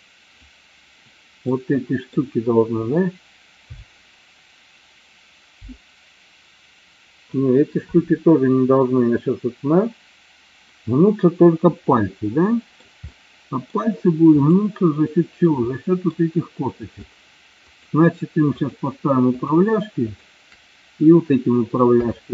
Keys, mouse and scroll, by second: 1.6-2.2 middle drag, 12.0-13.0 middle drag, 13.1-13.8 middle drag, 14.6 click, 15.8-16.2 middle drag, 17.7-18.2 shift+drag, 19.4 shift+click, 20.2 shift+click, 22.0 KP_3.